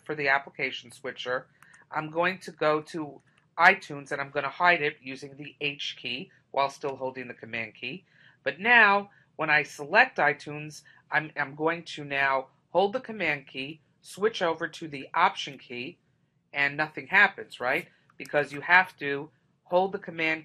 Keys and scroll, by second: 18.4 super+Tab.